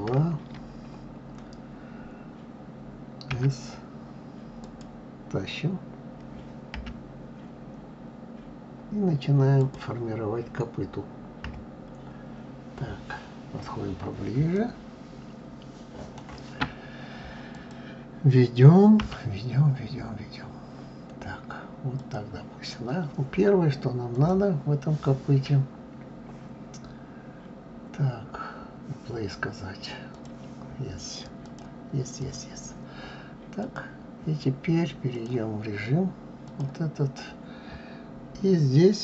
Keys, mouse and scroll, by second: 11.2 KP_3, 12.8-13.8 scroll up 7, 14.3-17.3 shift+middle drag, 17.3 click, 18.8 g, 23.9 click, 29.9 click, 31.2-33.5 drag, 34.9 click, 36.2 click.